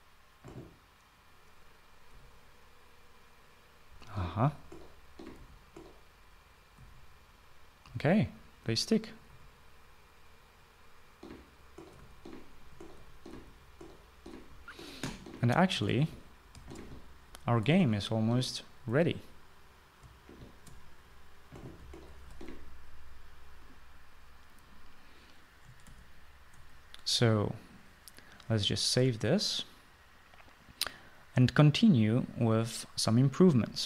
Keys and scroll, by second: 2.9 typing, 4.6-7.5 typing, 8.6-10.0 typing, 11.3-14.0 typing, 15.2-17.2 typing, 18.3-23.0 typing, 23.2 Escape, 26.6 ctrl+s.